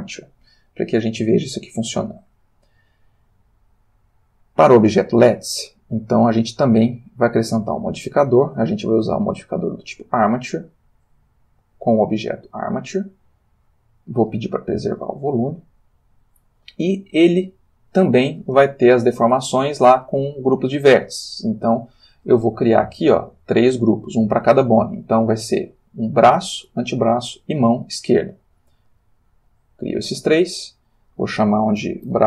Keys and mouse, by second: 0.7-1.9 shift+middle drag, 1.9 shift+click, 6.6 click, 7.9 click, 9.5 click, 11.6 click, 12.3 click, 14.7 click, 17.6 click, 18.8 ctrl+middle click, 28.9-30.0 drag, 30.7 click, 32.0-32.2 typing.